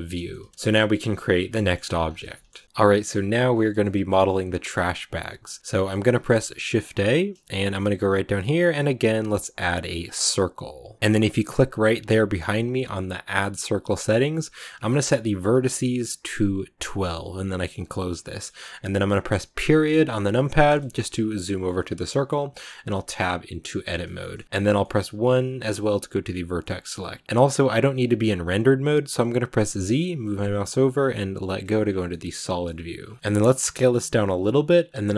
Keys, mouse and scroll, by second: 0.2 shift+middle click, 0.9 shift+c, 1.5 shift+middle click, 1.6-2.2 scroll up 9, 2.2-10.2 shift+middle drag, 15.3 click, 18.1-20.6 middle drag, 20.6 KP_Decimal, 21.1 scroll down 1, 21.2-22.6 middle drag, 22.6 Tab, 23.5 middle click, 24.4 1, 24.7-26.4 middle drag, 26.4 scroll up 1, 26.5-31.5 middle drag, 31.5 z, 31.7 scroll down 1, 32.0-33.2 middle drag, 33.2-33.5 scroll up 1, 33.5 s, 34.8 middle click.